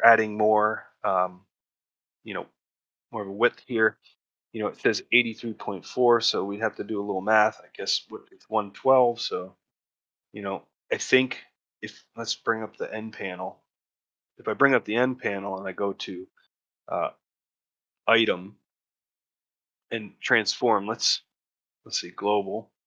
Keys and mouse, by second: 15.3 click, 21.9 click.